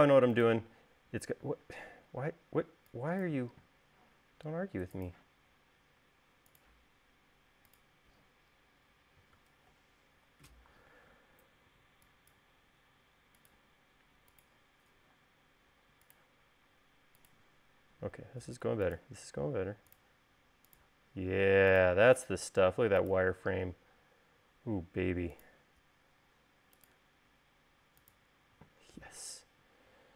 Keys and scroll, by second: 1.7 e, 12.0 e, 13.1 l.